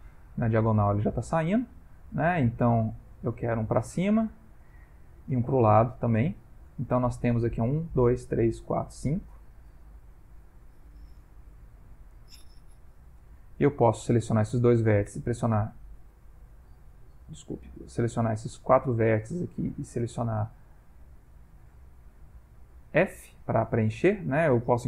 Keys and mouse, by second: 0.5 g, 3.2 e, 4.6 click, 4.8 e, 10.0 e, 13.5 click, 14.1 shift+click, 15.1 f, 16.1 ctrl+z, 17.1 click, 17.6 shift+click, 18.3 click, 19.8 ctrl+middle click, 20.9 click, 21.7 g, 22.4 click, 23.2 ctrl+middle click, 23.8 shift+middle click.